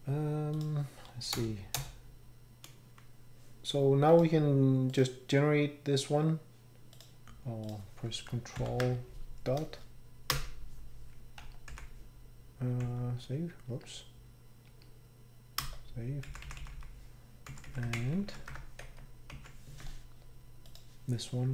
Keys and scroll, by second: 1.3 BackSpace, 1.7 BackSpace, 6.2 BackSpace, 8.6 ctrl+., 10.3 Return, 11.4 Escape, 13.7 Escape, 14.7 Escape, 15.6 Return, 16.2 Down, 16.4 Down, 16.6 Down, 16.8 Down, 17.9 Right, 18.8 Home.